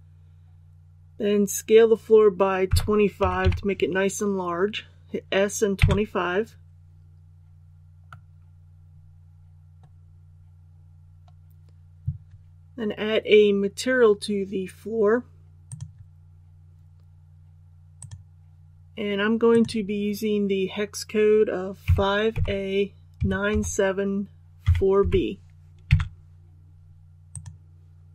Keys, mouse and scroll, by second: 2.6 s, 3.2 KP_2, 3.4 KP_5, 8.0-10.3 middle drag, 10.3-10.7 scroll down 1, 15.6 click, 21.8 KP_5, 23.1 KP_9, 23.5 KP_7, 24.6 KP_4, 27.3-28.1 drag.